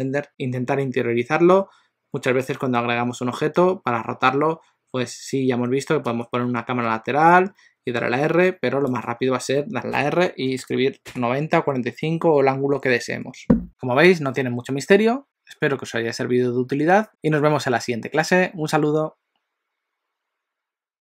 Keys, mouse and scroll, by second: 6.1 KP_3, 7.9 r, 9.9 r.